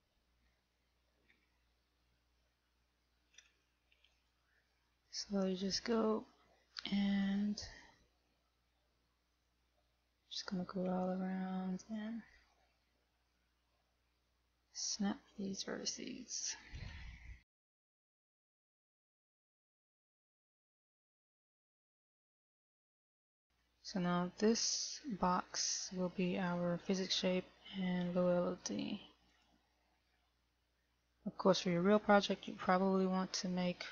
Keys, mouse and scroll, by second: 1.0 shift+middle click, 2.0 scroll up 4, 4.0 a, 4.5 click, 6.0 right click, 7.6 g, 11.0 right click, 11.3 g, 13.0 middle click, 14.8 shift+middle click, 15.5 middle click, 17.1 a, 22.9 shift+middle click, 22.9 scroll down 3, 23.8 scroll down 1, 24.1 scroll up 2, 24.6 shift+middle click, 25.9 click.